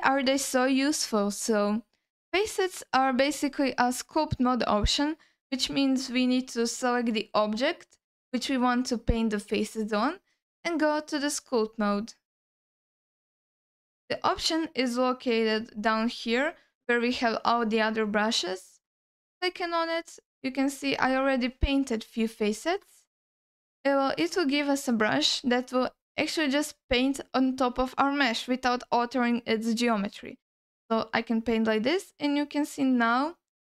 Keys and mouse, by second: 3.4 click, 10.3-11.8 drag, 13.3-15.6 drag, 18.8 click, 20.5 alt+middle click, 21.0 ctrl+alt+middle click, 21.9 middle click, 22.5 shift+middle click, 23.3 ctrl+alt+middle click, 25.1 alt+middle click, 28.7-29.9 middle drag, 30.7 alt+middle click, 31.1-33.7 drag.